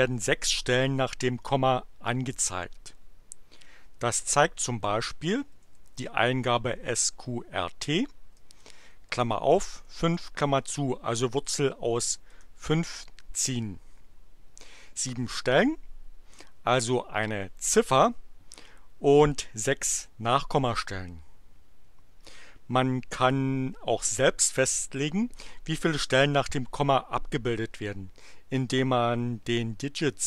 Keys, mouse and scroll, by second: 5.3-7.3 typing, 8.5 shift+8, 9.7 5, 10.4 shift+9, 12.3 Return.